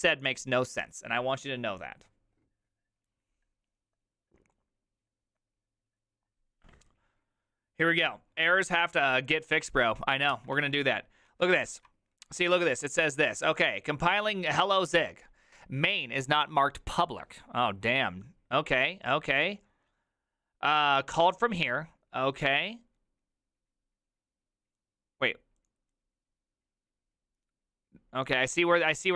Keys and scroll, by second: 10.4 alt+{, 11.3 ctrl+a, 11.5-14.3 typing, 11.7 ctrl+u.